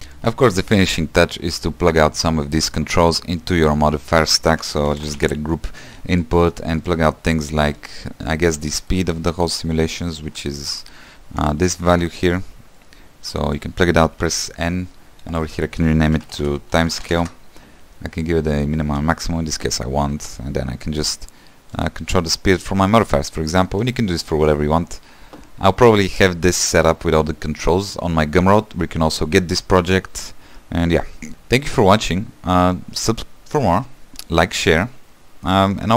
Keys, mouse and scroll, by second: 0.0 click, 6.2 shift+a, 13.6-20.4 drag, 20.4 space, 21.2-23.6 drag, 23.6-25.2 middle drag, 25.2-25.6 scroll down 3, 26.0-28.5 scroll up 2, 31.3 space.